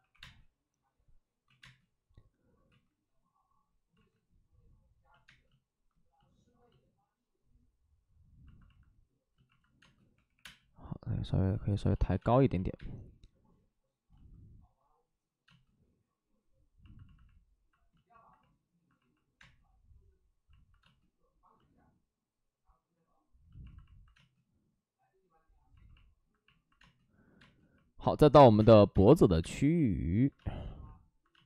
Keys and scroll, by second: 0.0-0.1 typing, 1.4 ctrl+z, 1.5 space, 2.6 ctrl+z, 5.2 ctrl+z, 5.2 space, 9.7 space, 10.1 3, 10.3 3, 10.3 space, 11.8 space, 16.1 space, 17.9 space, 19.3 space, 20.7 space, 24.1 space, 27.3 space, 28.4 1, 28.5 space, 30.6 ctrl+z, 31.3 space.